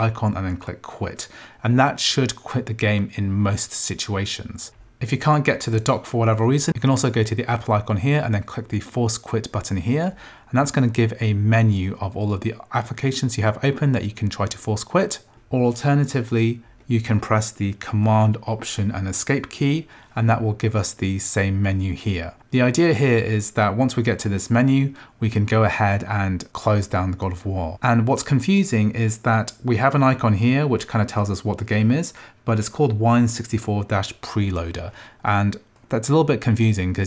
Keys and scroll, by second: 19.1 alt+super+Escape.